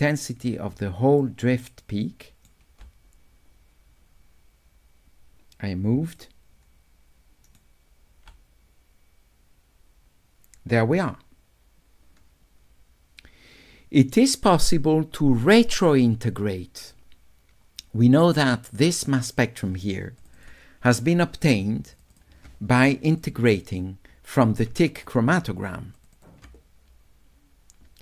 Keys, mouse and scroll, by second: 1.2 right click, 2.0 click, 2.1 right click, 6.2 right click, 6.9 click, 15.4-18.9 drag, 22.0 ctrl+click, 22.2 ctrl+click, 23.2 click, 24.9 ctrl+click, 26.0 ctrl+click, 26.2 ctrl+click.